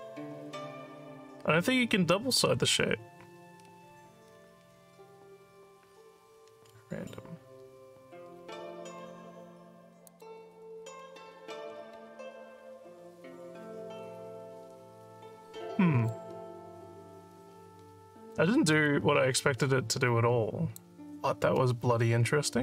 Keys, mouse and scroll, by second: 3.6 scroll down 2, 4.3 scroll down 2, 10.1 click, 16.1-18.3 alt+drag, 18.8-20.8 alt+drag.